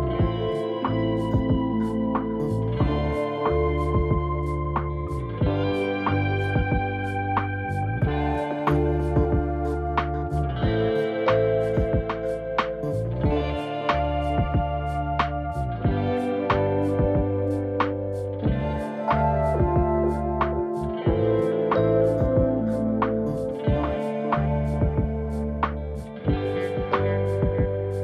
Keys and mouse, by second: 15.3 ctrl+z, 15.5 ctrl+z, 15.7 ctrl+z, 15.8 ctrl+z, 16.3 ctrl+z, 16.6 ctrl+z, 16.9 ctrl+z, 17.2 ctrl+z, 17.9 ctrl+z, 18.0 ctrl+z, 18.2 ctrl+z, 18.4 ctrl+z, 18.6 ctrl+z, 18.8 ctrl+z, 19.0 ctrl+z, 19.1 ctrl+z, 19.3 ctrl+z, 20.5 ctrl+shift+z, 20.7 ctrl+shift+z, 20.8 ctrl+shift+z, 21.0 ctrl+shift+z, 21.2 ctrl+shift+z, 21.4 ctrl+shift+z, 21.5 ctrl+shift+z, 21.7 ctrl+shift+z, 21.9 ctrl+shift+z, 22.1 ctrl+shift+z, 22.5 ctrl+shift+z, 22.7 ctrl+shift+z, 22.9 ctrl+shift+z, 23.1 ctrl+shift+z, 23.3 ctrl+shift+z, 23.5 ctrl+shift+z, 23.7 ctrl+shift+z, 23.8 ctrl+shift+z, 24.1 ctrl+shift+z, 24.2 ctrl+shift+z, 24.4 ctrl+shift+z, 24.6 ctrl+shift+z, 24.8 ctrl+shift+z, 25.0 ctrl+shift+z, 25.3 ctrl+shift+z, 25.5 ctrl+shift+z, 27.0 g.